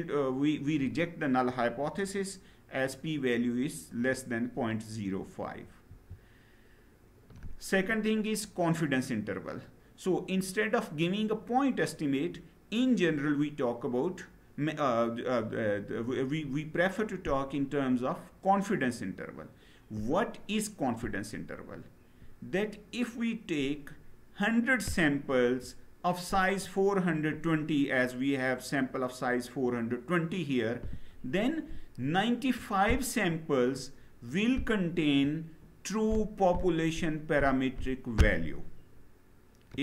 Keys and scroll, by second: 5.6 Down.